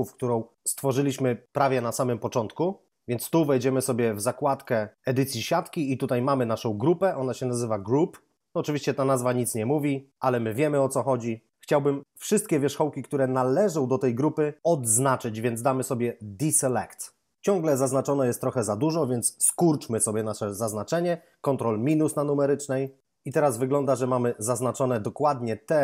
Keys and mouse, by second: 4.4 click, 16.4 click, 21.8 ctrl+-, 23.2 ctrl+Up.